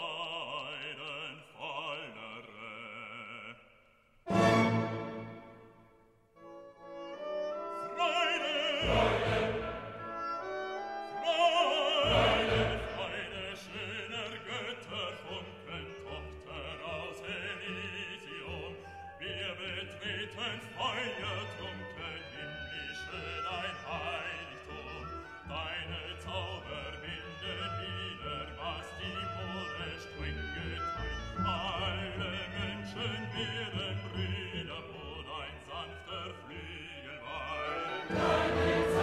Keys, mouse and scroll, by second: 1.1 click, 1.8 1, 2.3 0, 3.2 click, 3.9 1, 4.4 0, 5.9 click, 7.3 click, 9.6-10.7 drag, 11.9 click, 13.1 5, 13.5 0, 14.4-15.7 drag, 16.2-17.6 drag, 18.3 click, 19.5 click, 22.4 click, 24.1 click, 25.1 click, 25.7 1, 26.1 5, 27.1 click, 27.9 1, 28.5 0, 29.6 click, 30.7 click, 32.1-33.1 drag, 33.4-34.9 drag, 35.1 scroll down 1, 36.3 click, 37.3-38.4 drag.